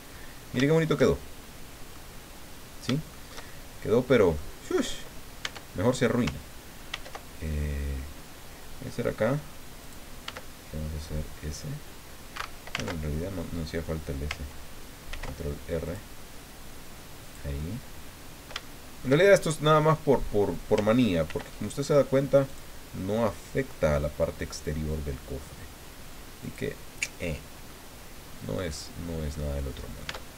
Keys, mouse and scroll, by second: 0.1-0.5 scroll up 2, 0.6-2.1 shift+drag, 2.4 scroll down 2, 3.1-4.5 shift+drag, 5.4 Tab, 6.9 ctrl+r, 9.8 click, 10.2 s, 12.3 Escape, 12.7 ctrl+z, 15.1 ctrl+r, 15.8 click, 17.2 click, 17.6-19.2 middle drag, 19.6 middle click, 21.2 ctrl+r, 22.4 click, 26.4 click, 27.7-28.9 drag, 29.0 scroll down 2, 29.3 click, 30.1 Tab.